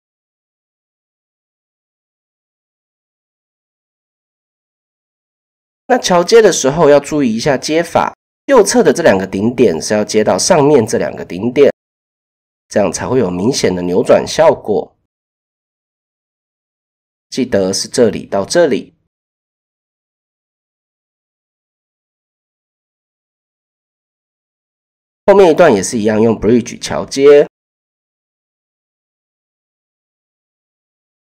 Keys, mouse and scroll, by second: 0.3-2.3 drag, 3.9 click, 4.6 click, 4.9 middle click, 5.1 typing, 6.1 middle click, 7.6 middle click, 9.1 middle click, 11.2 middle click, 11.9 middle click, 12.3 middle click, 20.5 middle click, 21.2 middle click, 22.5 KP_7, 23.2 shift+middle click, 24.2 shift+middle click, 25.9 middle click, 26.4 middle click, 27.2 shift+middle click, 28.2-29.5 middle drag, 29.9 middle click, 30.9 middle click.